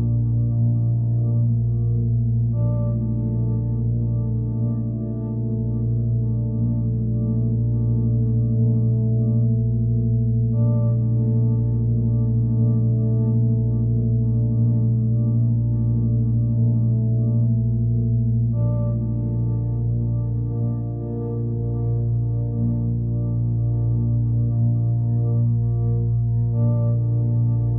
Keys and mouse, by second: 0.5 click, 1.1 alt+click, 2.2 alt+click, 3.4 typing, 3.6 click, 4.8 Escape, 4.8-5.8 typing, 5.8 click, 6.5 click, 6.9-9.4 typing, 8.9 click, 9.4 click, 9.9 click, 10.3 click, 11.3-12.4 drag, 13.6-15.0 drag, 15.5 click, 17.1-21.4 drag, 22.8 click, 23.2 click, 26.3-26.6 alt+shift+drag, 26.8 alt+shift+drag, 27.3 alt+shift+drag, 27.6 alt+shift+drag.